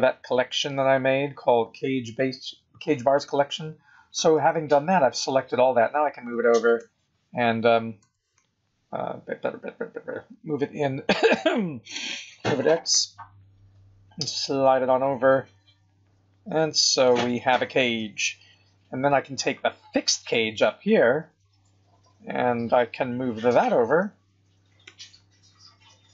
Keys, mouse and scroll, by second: 0.2-0.8 scroll up 5, 5.6 g, 8.0 g, 18.6 scroll up 3, 19.0-20.8 scroll down 11, 20.8 click, 22.9 KP_1, 23.9 g.